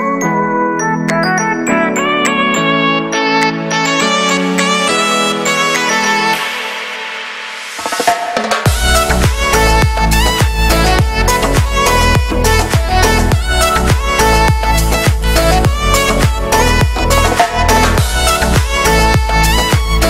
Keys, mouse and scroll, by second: 0.1 click, 0.7 scroll down 1, 0.8 middle click, 1.0 z, 1.3 middle click, 1.6 z, 1.7-3.3 shift+middle drag, 3.3-3.6 scroll up 2, 3.6 shift+middle click, 4.0-5.2 drag, 5.2 x, 5.3 click, 5.6 x, 5.6 click, 6.3 scroll down 1, 6.5 shift+middle click, 6.9 scroll up 2, 7.1-11.6 drag, 11.9-17.3 shift+middle drag, 12.7 z, 15.4 scroll down 2, 17.3 scroll up 1, 17.5 shift+middle click, 18.0-18.5 scroll down 1, 18.8-19.4 scroll down 1, 19.4 click, 19.9 middle click.